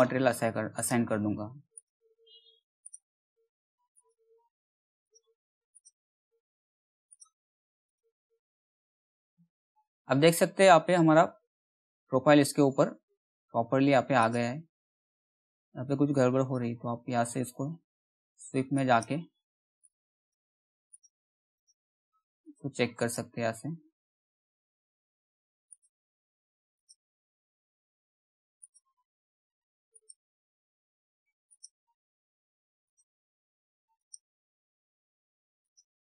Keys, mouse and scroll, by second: 7.9 scroll down 1, 9.3 alt+middle click, 10.2 scroll up 1, 11.2-11.8 scroll down 1, 12.1 scroll up 1, 13.7-20.4 drag, 25.2 click.